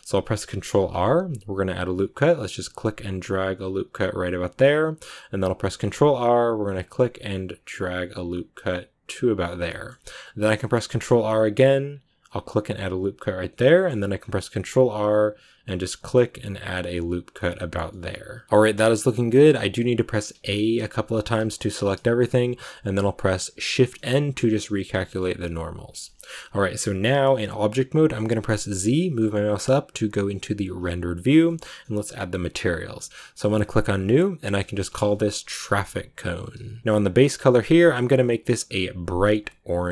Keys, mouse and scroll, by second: 0.6 ctrl+r, 5.8 ctrl+r, 9.6-10.8 shift+middle drag, 10.8 ctrl+r, 13.6 middle click, 14.4 ctrl+r, 17.7 scroll down 2, 17.8 middle click, 18.4 scroll up 1, 18.4-20.2 middle drag, 20.2 a, 21.1 a, 23.7 shift+n, 24.4 middle click, 25.3 Tab, 26.0-30.7 shift+middle drag, 30.7 z, 31.4-33.7 shift+middle drag, 33.7-36.8 drag, 36.8 scroll down 3, 38.2 click.